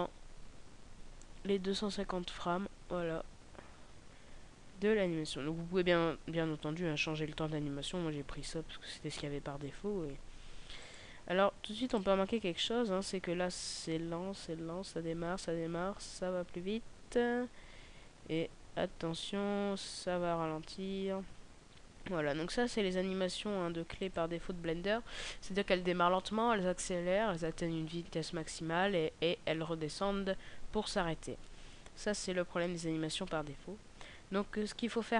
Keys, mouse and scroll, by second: 10.9 click, 24.1 click.